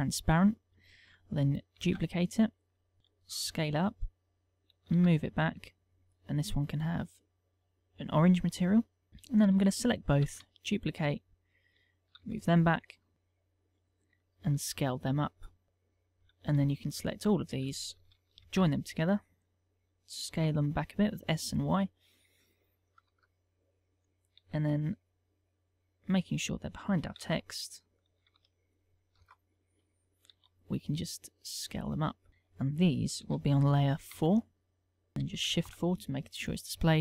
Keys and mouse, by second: 0.0 middle click, 0.8 click, 1.8 shift+d, 2.2 right click, 3.1 s, 3.8 click, 3.8 middle click, 5.0 g, 5.6 click, 6.3 click, 8.5 middle click, 9.1 shift+middle click, 9.3 shift+click, 10.4 shift+d, 10.9 right click, 11.1 middle click, 12.2 g, 12.9 click, 13.1 KP_1, 13.1 KP_Decimal, 14.7 s, 15.6 click, 15.6 middle click, 16.6 shift+click, 17.0 shift+click, 17.4 shift+click, 18.7 ctrl+j, 20.4 s, 21.5 click, 21.7 middle click, 23.2 KP_0, 24.5 g, 25.8 click, 26.0 middle click, 27.3 g, 28.1 click, 28.3 g, 28.8 click, 29.3 KP_0, 30.4 s, 32.3 click, 33.3 m, 35.6 shift+4.